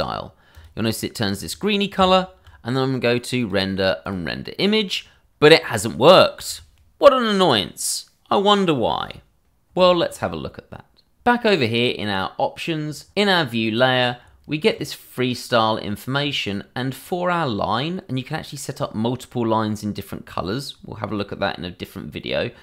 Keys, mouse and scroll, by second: 1.4 scroll down 1, 1.9 Tab, 3.4 click, 10.8 click, 14.0 scroll down 1, 16.2 scroll down 1, 22.4-22.6 scroll down 1.